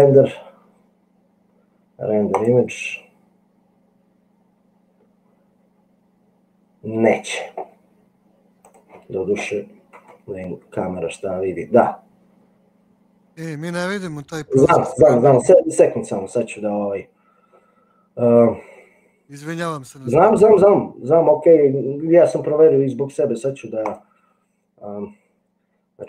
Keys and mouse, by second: 0.0-4.2 drag, 10.2 KP_0.